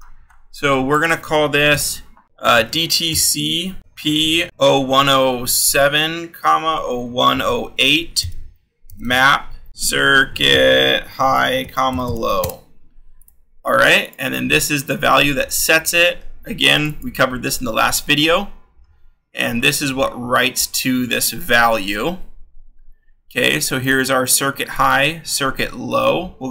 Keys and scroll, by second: 1.7-12.0 typing, 2.4 scroll, 15.6-20.3 scroll.